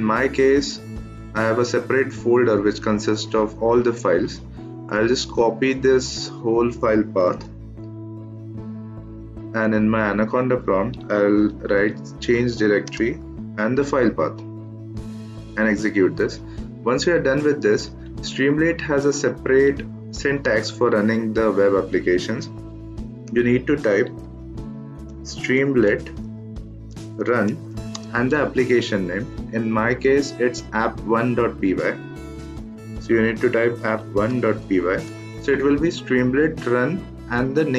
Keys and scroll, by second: 7.2 ctrl+c, 11.3-11.7 typing, 12.8 space, 13.6 ctrl+v, 15.3 Return, 22.7-28.1 typing, 31.9-35.5 typing.